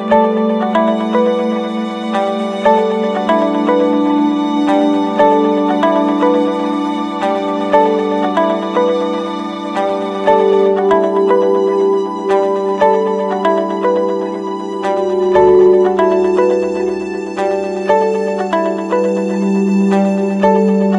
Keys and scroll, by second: 2.1 Return, 7.3 ctrl+-, 19.3 ctrl+-, 19.7 ctrl+0.